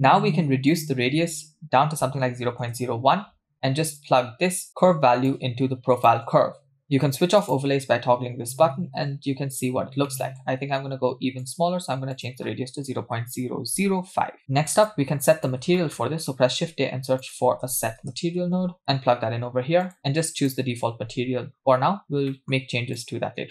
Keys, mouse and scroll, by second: 0.7-2.6 drag, 4.0-4.7 drag, 4.7 middle click, 5.3-6.6 drag, 7.4 click, 10.1 middle click, 10.5-11.4 scroll up 1, 11.4 scroll up 1, 11.4-14.4 drag, 14.4 middle click, 14.4-14.8 scroll down 3, 14.9 click, 15.8 middle click, 16.5 shift+a, 19.8-21.0 drag, 21.7-22.3 scroll down 2, 22.3 middle click, 23.0-23.5 drag.